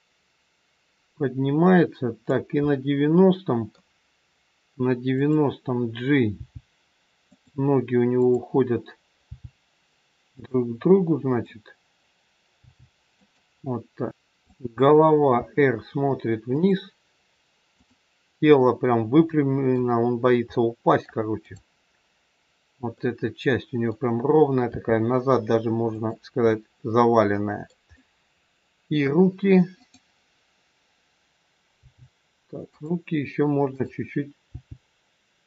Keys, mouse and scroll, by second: 2.6 middle click, 5.2 click, 6.4 g, 8.1 click, 9.2 g, 11.2 click, 12.5 g, 14.1 middle click, 14.5 click, 15.3 r, 17.7 click, 19.1 middle click, 20.1-20.7 scroll up 2, 20.5 middle click, 21.4 click, 23.0 middle click, 24.6 r, 26.6 middle click, 29.8 click, 31.8 g, 33.8 click, 34.5 g.